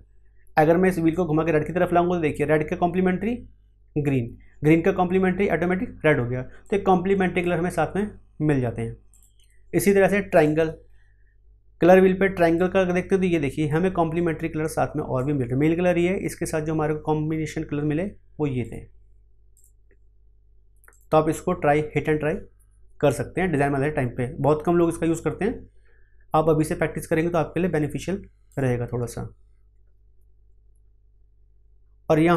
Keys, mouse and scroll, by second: 1.1-6.6 drag, 6.6-9.1 drag, 12.5-18.6 drag, 18.6 click, 28.4 click.